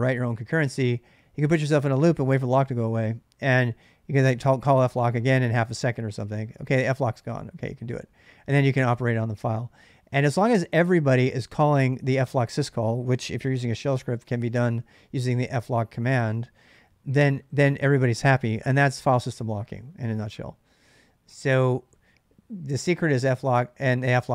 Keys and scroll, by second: 13.0-16.3 typing.